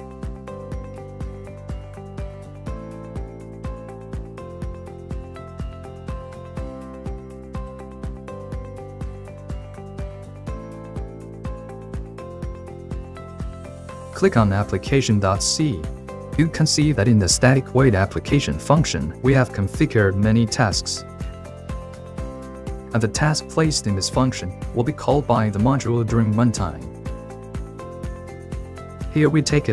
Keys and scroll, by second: 5.2 ctrl+c, 16.6 ctrl+v, 28.4 ctrl+2.